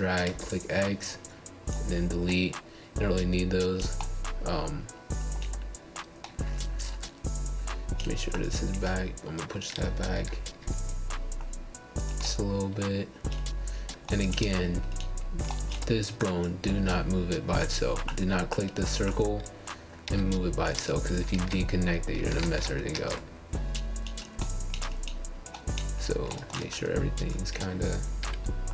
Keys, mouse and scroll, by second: 0.0 middle click, 1.0 click, 2.5 g, 4.9 click, 5.5 g, 6.5-8.4 middle drag, 8.4 scroll down 2, 8.9 scroll up 4, 9.1-9.6 scroll down 3, 9.7 shift+middle click, 10.2 click, 11.4 g, 13.0 click, 13.2 g, 14.4-16.2 middle drag, 16.2 click, 16.5 g, 17.6-20.6 middle drag, 21.5 click, 22.2 click, 22.7-23.9 middle drag, 24.0 click, 25.0 r, 27.0 g, 28.1-28.7 middle drag.